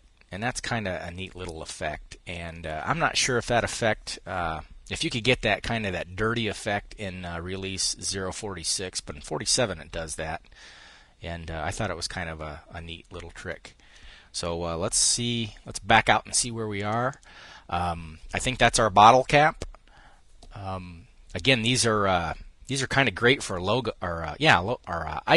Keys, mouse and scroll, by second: 0.8-2.0 drag, 14.4 5, 16.1 click.